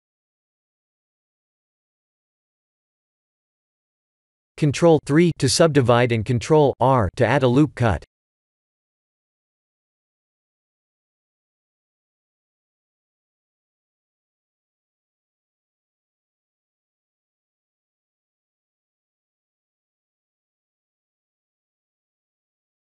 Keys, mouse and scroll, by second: 3.6-4.2 middle click, 4.0 middle click, 4.0 middle click, 4.1 middle click, 4.8 ctrl+3, 5.3 Tab, 5.6 ctrl+r, 10.1 ctrl+r, 12.6 ctrl+r, 16.9 ctrl+r, 19.4 Tab, 19.7 shift+z, 20.6-21.6 middle click, 20.8 middle click, 20.9 middle click, 21.3 middle click, 21.3 middle click, 22.6 middle click.